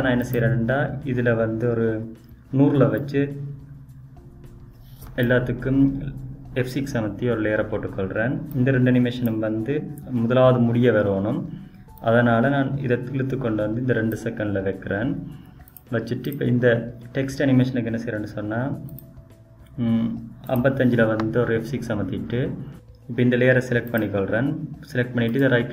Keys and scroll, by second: 5.3 F6, 18.0 F6.